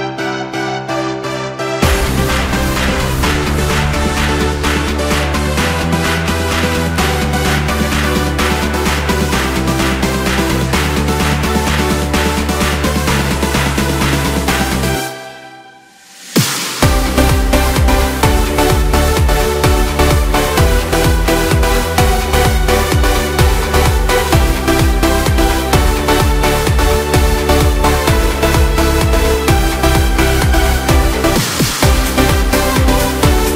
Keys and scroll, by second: 17.4 Return.